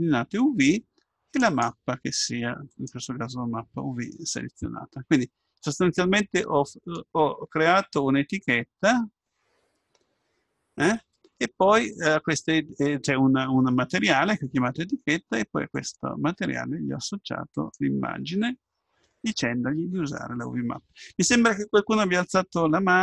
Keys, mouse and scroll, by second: 1.4-3.3 drag, 6.8-8.9 drag, 15.8-20.4 drag.